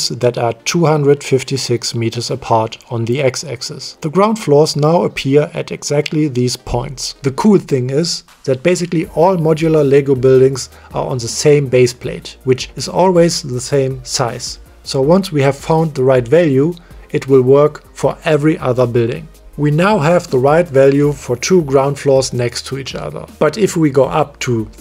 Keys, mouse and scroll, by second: 1.8 click, 5.5 click, 6.5 m, 7.2-7.8 middle drag, 8.3-8.9 middle drag, 10.3 shift+middle click, 12.3 drag, 12.5-13.3 middle drag, 14.0 click, 15.4-15.8 shift+middle drag, 20.2 click, 21.1 click, 22.4 click, 23.5 click.